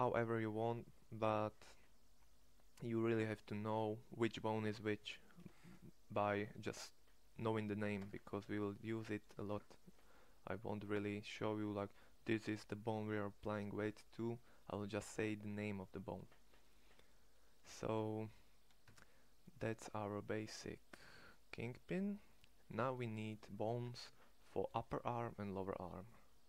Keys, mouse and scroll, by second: 7.8 Tab, 18.7 Tab, 22.7-25.9 middle drag.